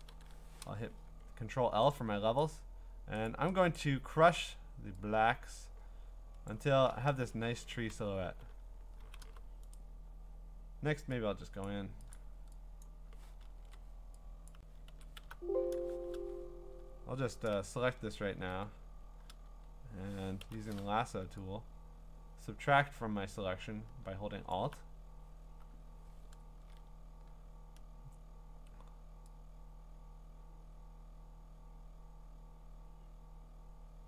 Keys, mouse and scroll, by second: 0.1 ctrl+l, 2.4 click, 3.3 click, 3.8 click, 6.5 click, 7.1 Return, 8.2-9.2 typing, 9.8 right click, 11.7 click, 12.1 click, 12.8 click, 13.6 ctrl+z, 14.5 click, 14.9 ctrl+z, 15.2 alt+x, 17.5 ctrl+click, 18.0-20.4 scroll, 20.4-20.9 scroll, 24.5 alt+click, 26.4-26.7 scroll.